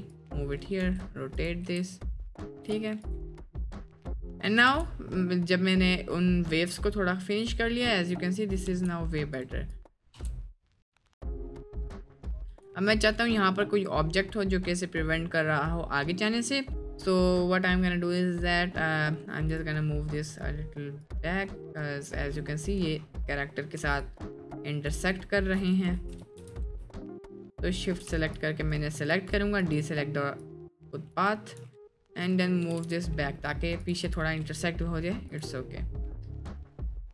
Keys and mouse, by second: 0.8 r, 1.7 f, 2.6 g, 4.7 space, 8.7 space, 9.3 click, 9.6 click, 10.1 space, 13.8-14.8 drag, 13.8 space, 17.8-18.5 middle drag, 18.8-19.1 middle drag, 19.4 click, 20.0 middle click, 21.2-22.2 drag, 22.7 middle drag, 23.4 middle click, 24.1-25.0 ctrl+drag, 26.2 ctrl+shift+x, 27.1-27.9 shift+drag, 28.5 ctrl+click, 29.1 ctrl+click, 29.6 ctrl+click, 30.4 ctrl+click, 31.3-31.6 ctrl+drag, 31.8 middle click, 32.2 middle click, 32.6 g, 34.0 click, 35.3 click, 36.5 click, 37.0 click.